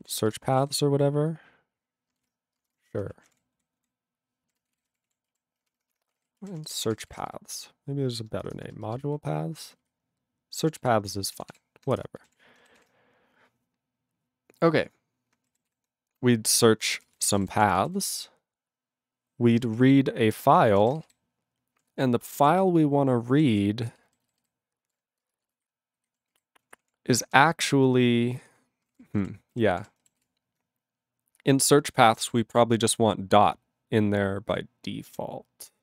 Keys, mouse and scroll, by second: 0.0-1.4 typing, 2.3 ctrl+e, 2.5 space, 2.6 {, 2.9 Return, 3.2 ctrl+a, 3.2 Tab, 3.8 ctrl+n, 4.4-7.6 typing, 8.5 Return, 8.8 ctrl+space, 9.1 ctrl+alt+f, 9.4 ctrl+alt+b, 9.8 ctrl+alt+f, 10.8 ctrl+g, 11.3 ctrl+s, 11.9 Return, 12.3 ctrl+e, 12.8 ctrl+s, 15.7 ctrl+s, 17.1 ctrl+space, 17.1 ctrl+e, 17.1 ctrl+n, 17.3 ctrl+n, 17.3 ctrl+e, 17.4 ctrl+g, 17.5 ctrl+p, 17.6 ctrl+e, 17.7 ctrl+n, 17.9 ctrl+n, 20.3 ctrl+e, 21.1 alt+b, 23.1 ctrl+e, 23.3 ctrl+n, 24.0 ctrl+e, 24.2 alt+b, 24.2 alt+b, 24.4 alt+b, 25.2 ctrl+space, 25.6 ctrl+alt+f, 25.9 ctrl+alt+f, 26.3 ctrl+g, 26.6 ctrl+p, 26.8 ctrl+p, 27.2 ctrl+p, 28.2 ctrl+n, 28.4 ctrl+n, 28.8 ctrl+space, 28.9 ctrl+a, 28.9 ctrl+p, 29.0 ctrl+p, 29.2 ctrl+w, 29.5 ctrl+k, 29.7 ctrl+p, 29.8 ctrl+e, 30.2 ctrl+s.